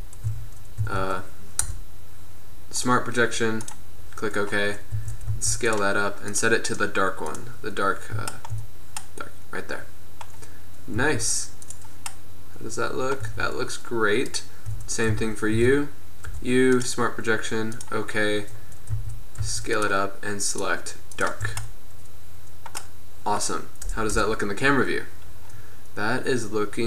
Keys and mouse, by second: 0.4 a, 0.9 a, 1.7 u, 5.2 a, 5.5 s, 6.4-8.0 drag, 8.0 middle drag, 9.5 middle click, 9.7 drag, 10.0-11.2 middle drag, 11.2 s, 12.2-12.5 middle drag, 13.3 middle click, 13.5 Tab, 14.8 Tab, 15.2 a, 15.6 a, 16.3 u, 19.0 a, 19.5 s, 20.6-21.7 drag, 21.7 Tab, 21.8-22.6 drag, 24.2 KP_0.